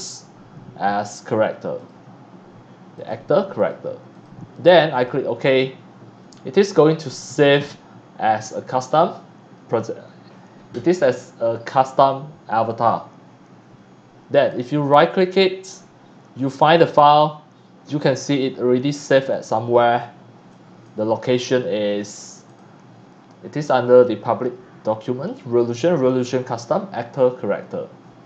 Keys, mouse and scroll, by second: 1.7 click, 3.0 click, 3.6 click, 4.1 click, 4.9 click, 13.3 middle click, 13.3 scroll up 1, 14.4 right click, 16.4 click, 19.3 click, 20.5-20.9 drag, 22.4 click, 27.4 click, 28.0 scroll down 1.